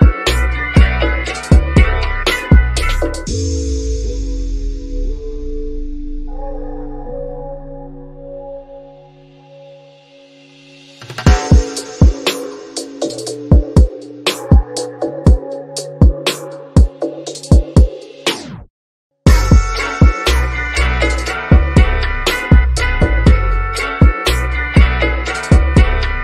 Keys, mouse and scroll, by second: 0.3 scroll down 1, 1.8-2.6 scroll up 1, 3.0 click, 3.9-4.3 scroll down 1, 4.3 shift+click, 8.4 click, 11.6 scroll down 1, 11.9 shift+middle click, 12.6 scroll up 1, 14.0-16.9 shift+drag, 16.9-17.2 scroll down 1, 19.2 2, 21.0 click, 22.3-24.7 shift+middle drag, 24.7 scroll up 1.